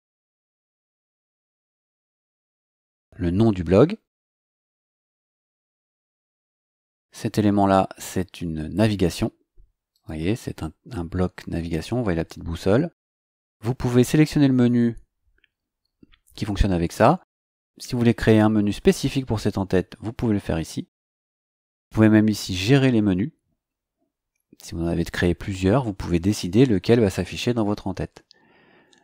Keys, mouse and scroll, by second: 1.2-2.9 typing, 6.2 click, 9.9 click, 13.5 click.